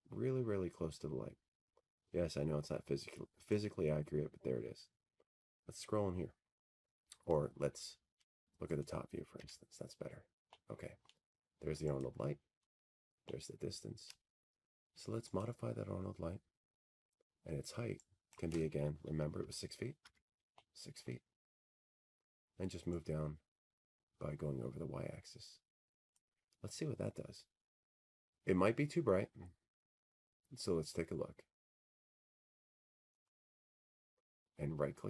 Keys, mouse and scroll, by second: 0.3 middle click, 0.3-1.2 scroll, 2.6 w, 9.1 click, 11.5-12.1 scroll, 12.1-14.2 scroll, 14.4 click, 15.1 t, 15.6-16.4 scroll, 16.7-17.2 scroll, 17.7 click, 18.0 scroll, 19.0-19.6 scroll, 19.6-20.2 scroll, 21.0 click, 23.9 click, 25.0 6, 25.6 Tab, 26.7 middle click, 26.9 middle click, 28.4 middle click, 31.7-33.8 drag.